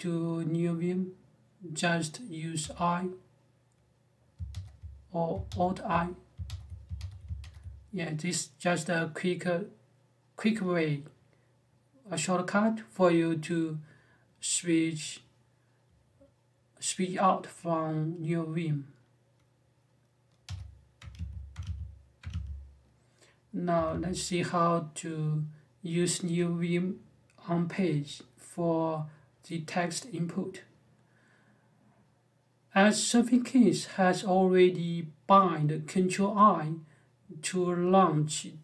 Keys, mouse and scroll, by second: 2.3 i, 4.2 alt+i, 5.2 alt+i, 6.2 alt+i, 6.7 alt+i, 7.2 alt+i, 20.2-22.0 typing, 23.5 g.